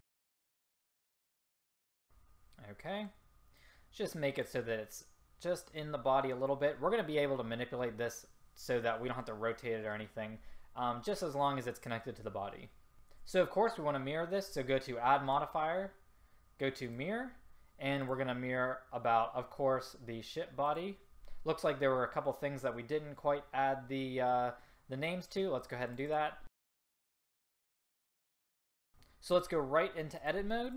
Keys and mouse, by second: 0.1 middle click, 0.5 s, 2.2 middle click, 3.7-5.5 drag, 15.4-20.1 drag, 25.5-26.6 drag, 26.9 click, 27.9 click, 28.6-29.8 drag, 30.2-30.7 drag.